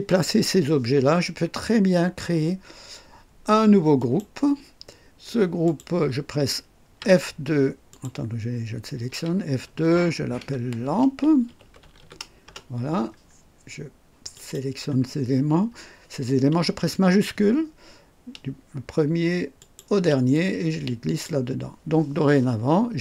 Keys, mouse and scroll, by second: 4.0 click, 5.6 click, 7.0 F2, 7.9 click, 9.1 F2, 10.6-13.6 typing, 14.3 click, 19.6 shift+click, 20.3-21.4 shift+drag.